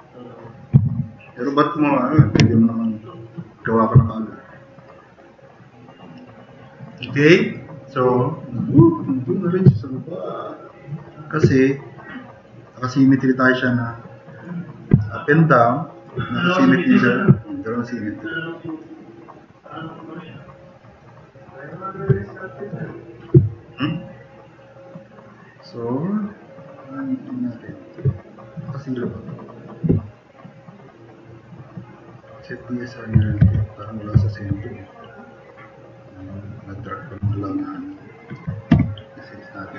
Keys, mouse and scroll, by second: 0.9-1.3 drag, 4.0-4.8 drag, 10.6-11.0 drag, 15.7 drag, 17.4-18.9 drag, 20.9-21.6 drag, 23.5-27.9 drag, 33.4 e, 34.2 click, 34.8-35.6 drag, 37.3 drag, 38.1 click, 38.7 t, 38.9-39.7 drag.